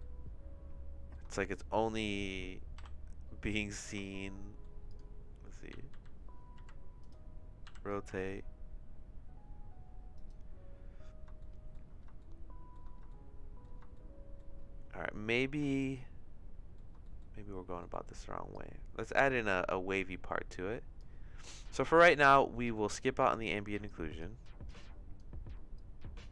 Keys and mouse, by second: 2.8 KP_Divide, 4.1 shift+middle click, 5.7 r, 7.6 r, 11.5 shift+middle click, 12.3 shift+middle click, 13.2 shift+middle click, 14.0 shift+middle click, 15.6-16.7 shift+middle drag, 18.5-21.0 drag, 21.7 middle click, 22.6 middle click, 23.4 click, 23.8 click, 24.6 click, 25.7 click.